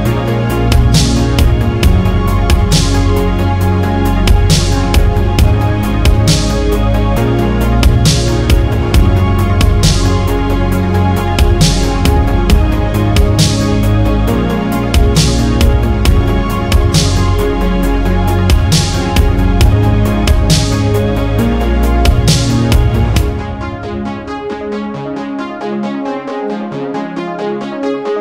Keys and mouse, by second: 3.5-4.1 middle drag, 6.2-7.9 drag, 13.9-15.6 drag, 17.0 middle click, 21.3-27.6 drag, 27.8 click.